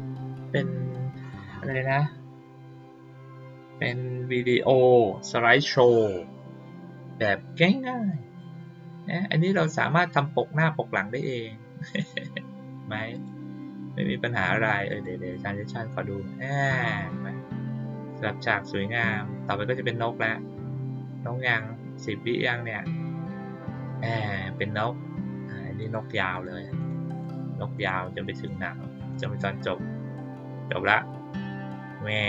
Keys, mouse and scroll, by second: 13.1 click, 14.8 click, 25.7 click, 26.3 click, 26.7 click, 27.1 click, 27.7 click, 28.3 click, 29.0 click.